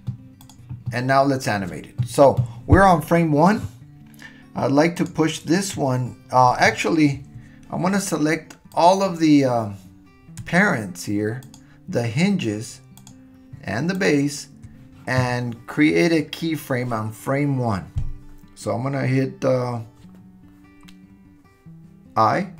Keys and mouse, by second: 8.7 click, 11.4 shift+click, 13.0 shift+click, 14.1 shift+click.